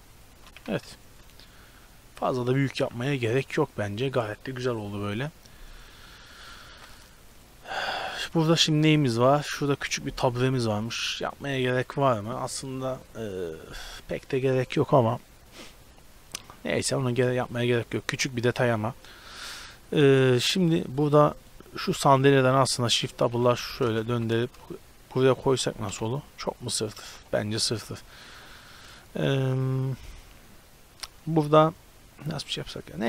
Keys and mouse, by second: 0.6 a, 1.3 middle click, 1.8 middle click, 6.8 ctrl+s, 21.4 right drag, 21.7-22.9 middle drag, 22.9 shift+d, 24.1 g, 25.9 KP_Decimal, 25.9 KP_0, 27.1 x.